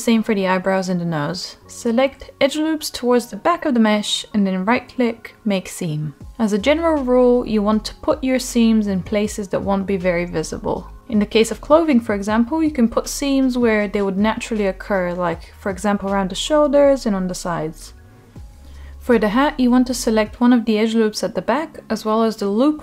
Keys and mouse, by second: 0.1 Tab, 1.7 shift+middle drag, 2.5-2.8 middle drag, 3.6 click, 4.9 shift+click, 5.1 shift+click, 5.9-6.5 middle drag, 7.1-7.9 right drag, 7.9 Tab, 9.3 Tab, 10.2 middle click, 11.6 2, 12.0 click, 12.2 click, 13.8-14.5 right drag, 15.1-15.7 middle drag, 15.8 Tab, 16.6 click, 17.3 Tab, 18.2-19.0 middle drag, 19.9 click, 20.7-22.8 middle drag.